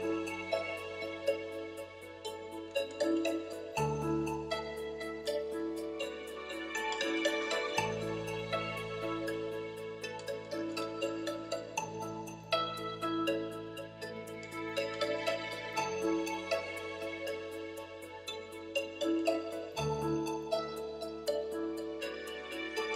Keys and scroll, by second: 6.0-7.4 typing, 20.7 super+z.